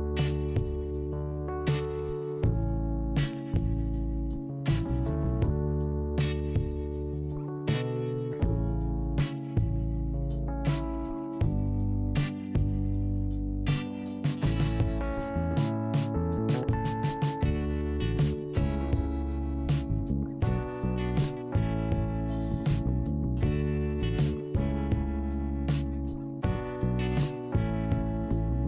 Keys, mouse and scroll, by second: 4.4 click, 4.6 click, 6.5 click, 9.1 scroll up 1, 10.2 click, 13.7 scroll up 2, 14.4 scroll down 2, 14.8 scroll up 1, 15.9 scroll down 1, 17.4 scroll up 1, 22.1 b, 22.7-23.8 scroll down 1, 23.8-25.6 scroll up 1, 26.6-27.3 scroll down 1, 27.3 scroll up 1.